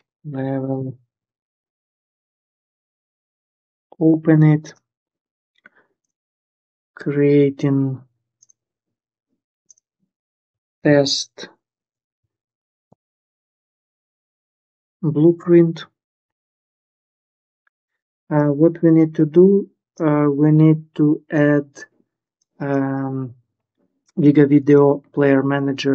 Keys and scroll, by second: 0.0-1.0 typing, 2.2 ctrl+s, 2.9 Return, 10.3-14.8 typing, 15.1 Return, 16.2 ctrl+s.